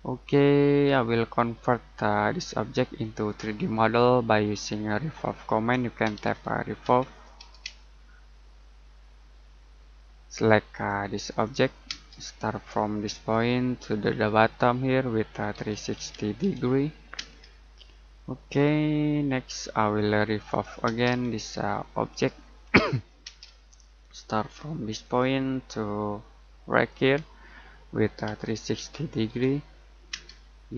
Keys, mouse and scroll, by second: 1.1-3.3 scroll up 1, 5.8-7.6 typing, 10.7 click, 11.8 space, 13.1 click, 15.3-17.1 typing, 18.7 middle click, 19.5-20.8 scroll up 1, 20.8 space, 21.3 click, 22.5-23.2 scroll up 1, 23.2 space, 25.0 click, 28.2-30.1 typing.